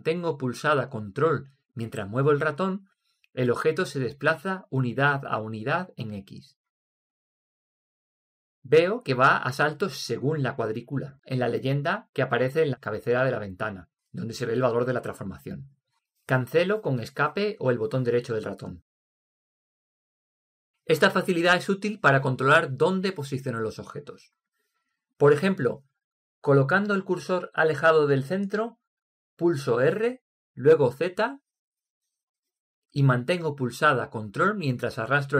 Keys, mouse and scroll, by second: 30.2 r.